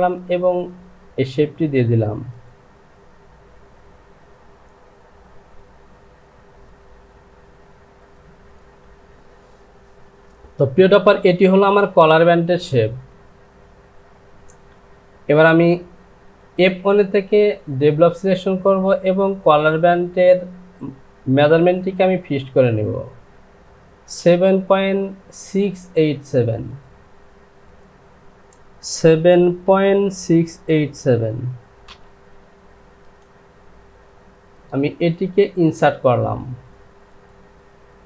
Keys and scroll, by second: 28.8 KP_7, 29.6 KP_Decimal, 30.2 KP_6, 30.9 KP_8, 31.8 Return.